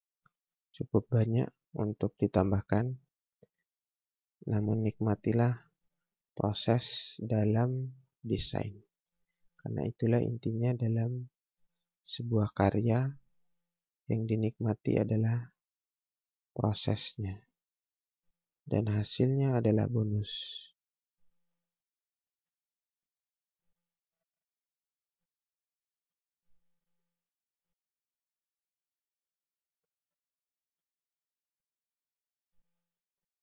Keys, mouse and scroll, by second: 0.3 space, 0.9 click, 7.8 space, 8.9 click, 9.8 right click, 10.3 scroll down 1, 10.9 click, 11.3-11.9 scroll up 1, 11.9 space, 12.5 scroll up 1, 13.6 click, 21.6 scroll down 1, 21.9 scroll up 1, 22.3 space, 23.0 click, 24.0 right click, 24.7 click, 25.1 scroll down 1, 25.4 scroll up 1, 25.9 space, 26.6 click, 30.7 space, 31.6 click, 32.6 right click, 33.2 click.